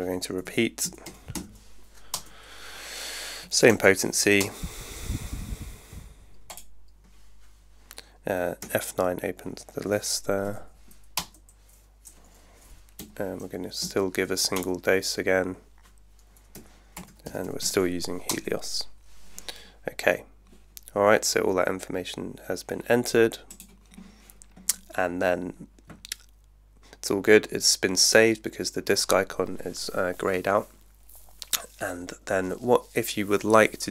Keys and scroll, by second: 0.2-1.1 typing, 2.1 Return, 3.4 2, 3.7 0, 4.4 Return, 8.7 F9, 10.5 Down, 11.1 Return, 13.0 F9, 13.8 Down, 14.5 Return, 16.6 F9, 16.7-18.1 typing, 18.3 Return.